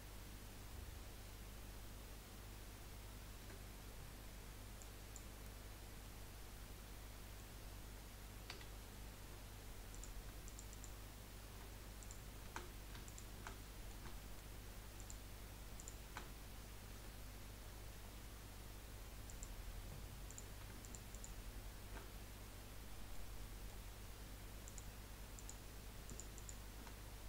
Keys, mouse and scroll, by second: 3.4 Delete, 6.2-8.6 middle drag, 8.6 2, 9.9 click, 10.4 alt+shift+click, 10.7 alt+shift+click, 12.0 click, 13.0 shift+click, 13.6-15.0 middle drag, 15.0 shift+click, 15.8 shift+click, 16.9 Delete, 20.3 click, 20.8 alt+shift+click, 21.1 alt+shift+click, 22.1-24.6 middle drag, 24.6 click, 25.3 click, 26.0 alt+shift+click, 26.3 alt+shift+click.